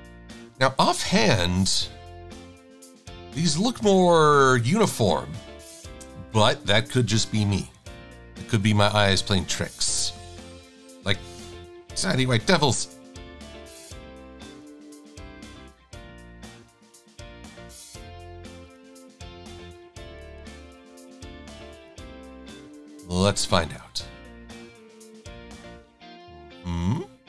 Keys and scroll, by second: 7.8 super+=, 7.9 super+=, 11.9 i, 21.4 a, 22.2 e, 24.1 a, 25.6 e, 26.6 a.